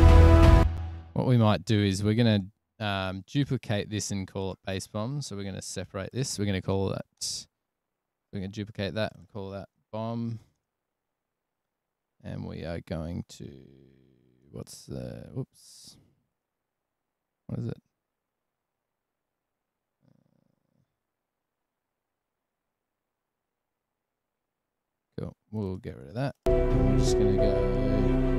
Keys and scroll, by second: 7.2 Return, 9.7-10.8 typing, 14.6 super+q, 17.5 super+w, 18.9 super+=, 21.9 super+e, 25.1 Delete, 26.1 Delete.